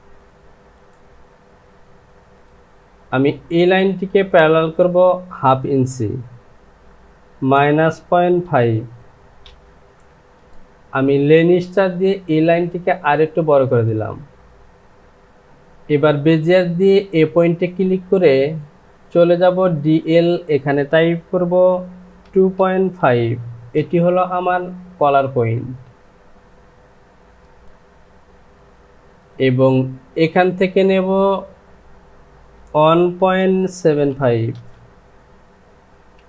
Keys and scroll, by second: 7.3 KP_Subtract, 8.4 KP_Decimal, 9.4 Return, 23.0 KP_Decimal, 33.7 KP_Decimal, 34.5 n.